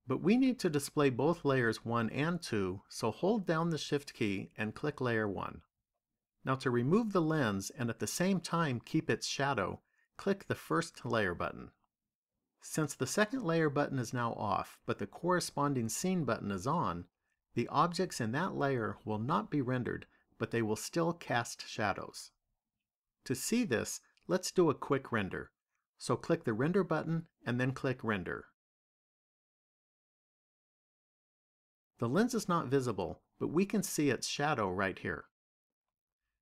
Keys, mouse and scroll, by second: 4.3 shift+click, 10.8 click, 26.7 click, 28.2 click.